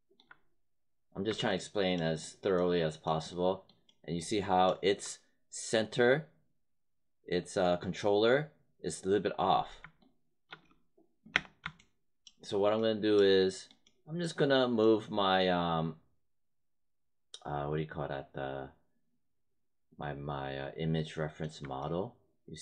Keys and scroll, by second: 10.5 space.